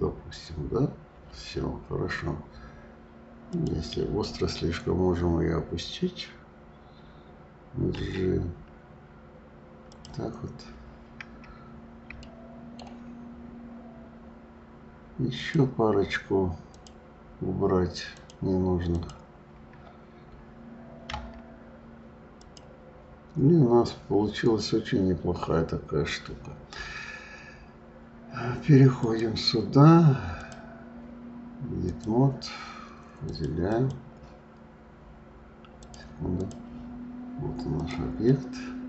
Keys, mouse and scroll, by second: 0.6 scroll down 2, 3.5 click, 10.4 scroll down 1, 11.6-12.2 scroll up 3, 12.2-13.2 shift+middle drag, 13.2-15.4 scroll up 5, 15.4 click, 16.6 shift+click, 18.1 shift+click, 18.9 shift+click, 21.1 Delete, 25.4-26.5 scroll down 2, 28.9 click, 30.4-33.3 drag, 33.6 click, 35.8-37.9 drag, 38.3-38.8 middle drag.